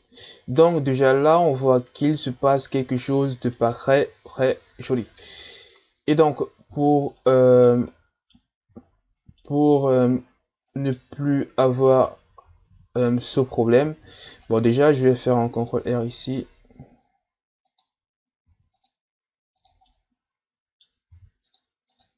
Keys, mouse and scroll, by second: 0.7-1.3 ctrl+scroll up 2, 1.8-2.7 ctrl+scroll up 10, 3.2-3.5 ctrl+scroll down 3, 3.5-4.8 middle drag, 4.8-5.4 ctrl+scroll up 4, 6.7-7.2 scroll down 4, 7.2-8.8 middle drag, 8.8-9.2 shift+scroll up 5, 9.2-9.8 middle drag, 9.8-10.7 ctrl+scroll up 4, 10.7-11.9 middle drag, 11.9-12.5 scroll up 2, 12.5 Tab, 13.8 ctrl+r, 18.5 ctrl+r, 19.9-21.1 middle drag, 21.1 ctrl+r.